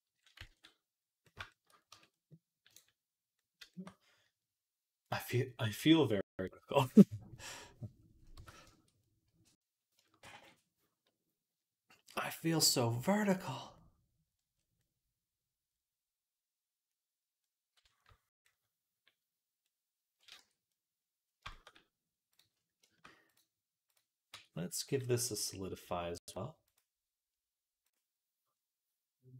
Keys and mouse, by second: 0.4 ctrl+s, 1.7 Tab, 2.0-3.2 right drag, 3.2-7.8 shift+drag, 8.2 Tab, 8.8-10.8 right drag, 11.0-15.5 right drag, 15.5-19.5 middle drag, 19.5-21.3 right drag, 20.2 Tab, 21.5 click, 24.2 Tab.